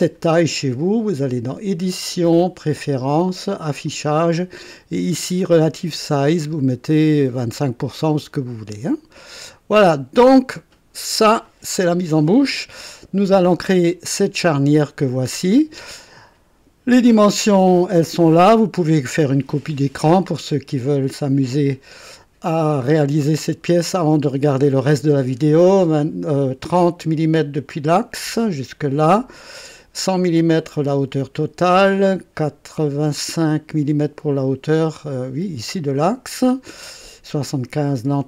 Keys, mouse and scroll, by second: 1.2 click, 2.4 click, 3.8 click, 9.9 click, 11.4 click, 12.3 right click, 14.4 click.